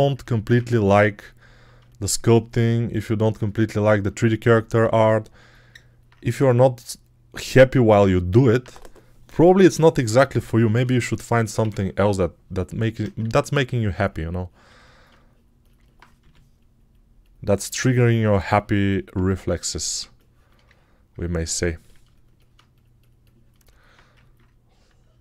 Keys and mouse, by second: 4.7 g, 10.6 1, 11.3 [, 11.5 [, 11.6 [, 16.1 g, 22.4-23.4 drag, 23.5-25.2 alt+drag, 24.9 x.